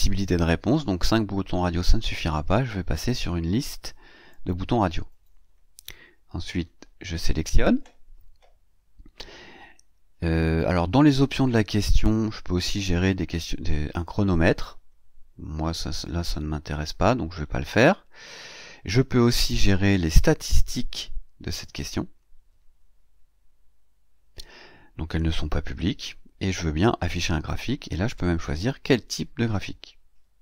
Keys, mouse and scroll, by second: 1.0 click, 4.2 click, 5.9 scroll down 2, 7.0 click, 9.5-9.8 scroll down 2, 10.4 scroll down 2, 11.0-11.4 scroll down 2, 13.8 click, 15.0-15.3 scroll up 2, 15.7 scroll down 2, 16.3 scroll down 1, 17.3-18.0 scroll down 4, 18.4 scroll down 2, 18.9-20.2 scroll down 4, 20.5 scroll down 2, 21.4 click, 22.2 scroll down 2, 22.9 scroll up 2, 23.2 scroll down 2, 27.1 scroll down 2, 28.0 click.